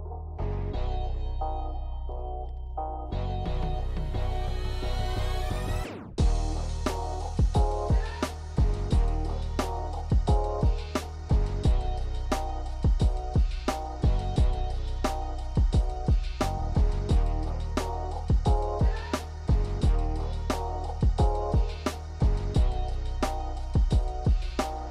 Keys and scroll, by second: 0.1 e, 2.7 e, 5.0 e, 12.5 ctrl+shift+b, 17.0 Tab, 18.1 Tab.